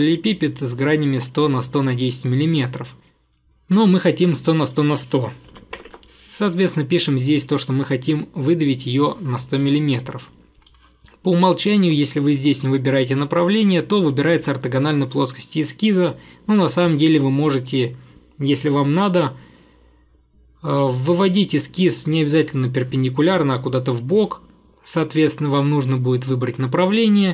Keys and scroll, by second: 5.5 typing.